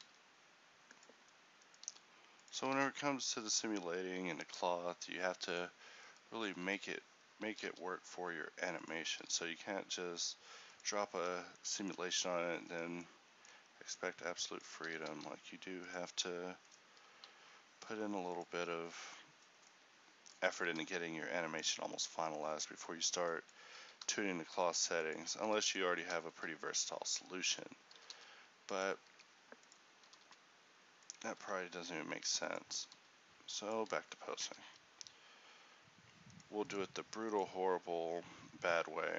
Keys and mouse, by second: 0.0 r, 2.0 r, 3.5 r, 3.5 g, 6.6 t, 6.7 t, 7.6 r, 10.3 r, 12.7 click, 12.8-15.1 right drag, 15.1 r, 17.1 g, 20.3 click, 20.7 r, 23.9 r, 25.5 a, 28.1 r, 29.6 r, 34.5 r, 34.5 a, 36.1 a, 36.4-39.1 drag.